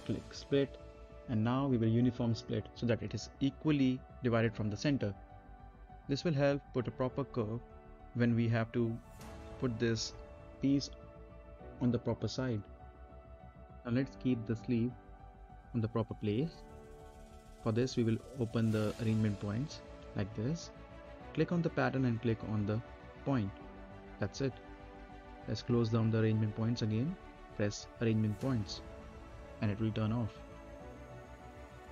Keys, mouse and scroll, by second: 0.6-8.0 drag, 10.0 click, 10.8-12.0 scroll up 1, 12.0 click, 12.9 scroll up 1, 13.1 middle click, 13.5 scroll up 1, 15.5-15.9 scroll down 1, 16.3 middle click, 18.0 click, 20.1-20.6 scroll up 1, 20.6 middle click, 20.9 right click, 21.5 click, 22.0 right click, 23.2 click, 23.6 right click, 24.1-24.5 scroll down 1, 24.5 middle click, 24.7-25.0 scroll up 1, 25.0 middle click, 30.0 middle click, 30.4 click, 30.6-31.0 scroll up 1, 31.0 middle click, 31.3 scroll down 1, 31.7 middle click.